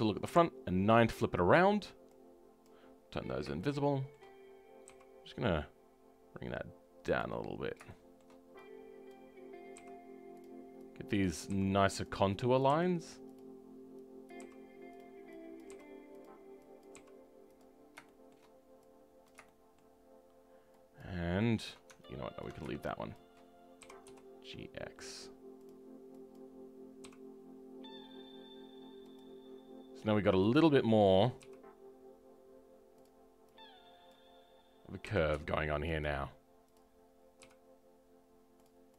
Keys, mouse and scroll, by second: 0.2 KP_9, 2.0 click, 2.9 scroll up 2, 3.5-4.8 shift+middle drag, 4.8 g, 7.5-7.8 scroll down 2, 7.8-9.0 shift+middle drag, 9.0 click, 17.7 scroll down 2, 18.0-19.2 shift+middle drag, 19.2 click, 19.4-20.9 shift+middle drag, 20.9 shift+click, 21.3-22.4 shift+middle drag, 22.4 ctrl+click, 23.8 g, 26.3 click, 27.0 g, 36.7 click, 37.4 g.